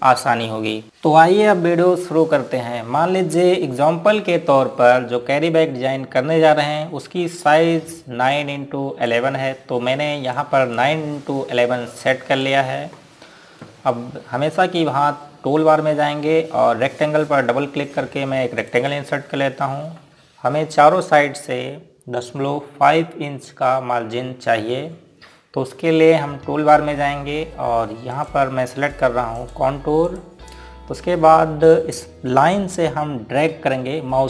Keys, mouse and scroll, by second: 10.1 click, 19.6 click, 29.2 click, 32.6 scroll up 1, 33.4 scroll down 1.